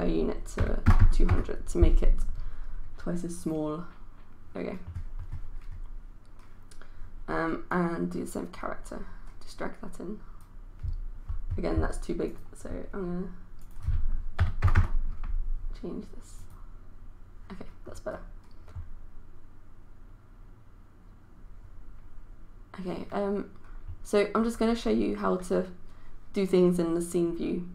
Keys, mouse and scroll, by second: 0.6 KP_2, 1.1 KP_0, 3.4-13.3 drag, 14.4 KP_2, 14.6 KP_0, 16.4 click.